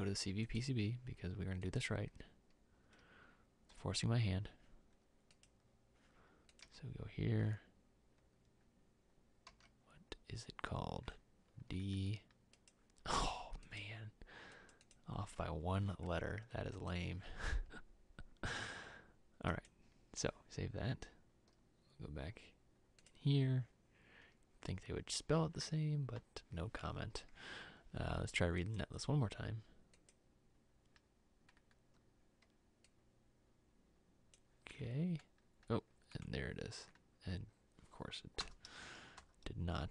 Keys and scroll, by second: 6.7 e, 9.7 d, 38.5 Delete, 39.3 Delete.